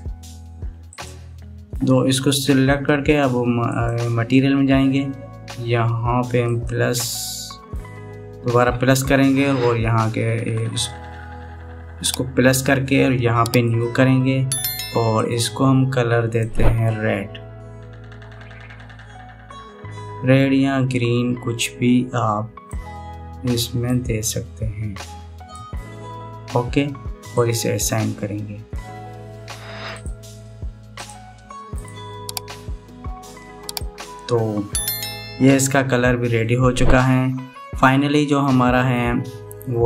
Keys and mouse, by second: 1.6 click, 2.5 middle click, 4.3 click, 7.2 click, 14.4 click, 15.8 click, 27.9 click, 31.7 click, 33.2 middle click, 34.5 middle click, 36.5 Tab, 37.1-38.6 middle drag, 39.1-39.7 middle drag.